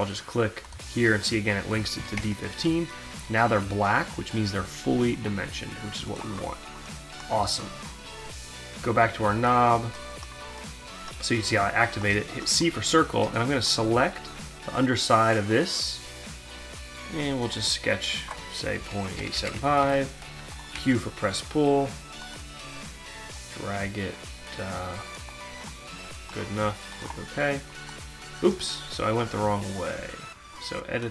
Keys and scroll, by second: 1.7 Return, 12.1 c, 18.4 Delete, 19.2 8, 19.4 5, 19.6 Return, 20.8 q.